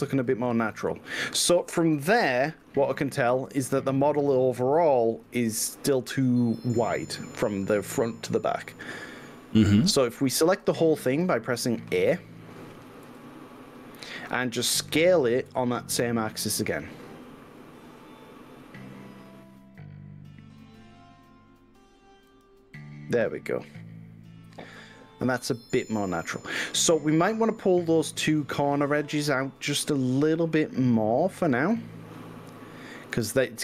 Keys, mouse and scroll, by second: 7.7-8.5 middle drag, 8.7-11.4 middle drag, 11.4-11.7 drag, 13.1 a, 15.5 s, 16.0 y, 22.4 click, 22.7-31.5 middle drag, 31.7 drag, 32.9 shift+drag.